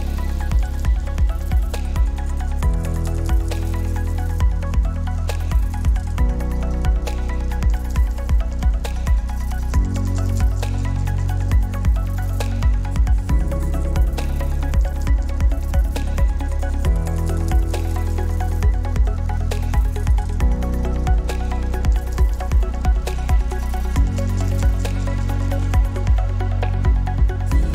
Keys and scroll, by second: 0.3 ctrl+z, 10.0 ctrl+z, 14.3 ctrl+z.